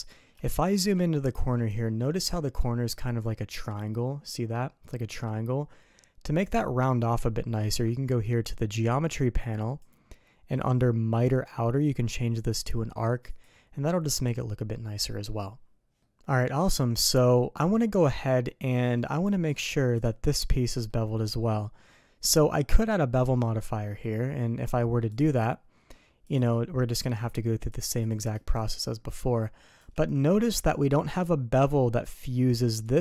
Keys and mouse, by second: 0.4 shift+drag, 0.9 ctrl+click, 1.7 shift+click, 9.5 click, 12.4 click, 16.0-17.7 middle drag, 18.7 middle click, 19.9 click, 20.8-22.1 middle drag, 23.8 middle click, 26.3 click, 27.7 click, 28.0 click, 28.5-29.8 shift+drag, 32.8 click.